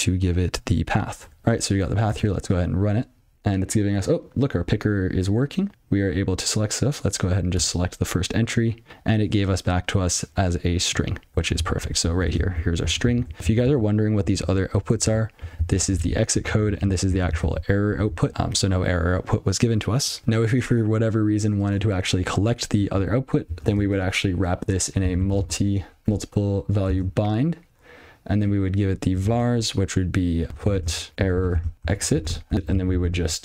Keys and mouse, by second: 1.4 alt+p, 8.9 click, 10.2 click, 10.7 click, 11.4 ctrl+p, 13.9 ctrl+n, 16.9 ctrl+p, 18.3 ctrl+n, 20.2 Tab, 23.7 ctrl+alt+space, 24.3 (, 25.2 u, 25.7 l, 26.4 Tab, 26.9 space, 29.6-32.7 typing.